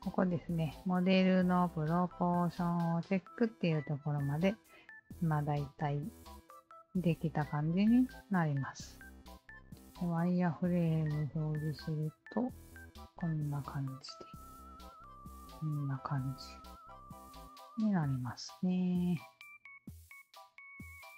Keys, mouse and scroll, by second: 4.5 click, 8.4 click, 11.1 click, 12.2 click, 13.3-14.6 alt+drag, 14.8-16.3 alt+drag, 16.5-18.7 alt+drag, 19.2-19.6 alt+right drag, 19.8 alt+click, 20.3 alt+middle drag, 20.7 click, 20.7 alt+right click.